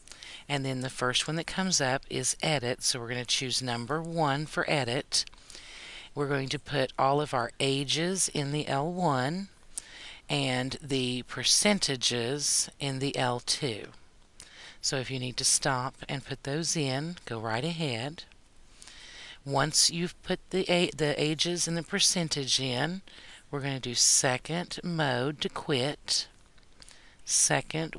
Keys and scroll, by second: 4.2 1.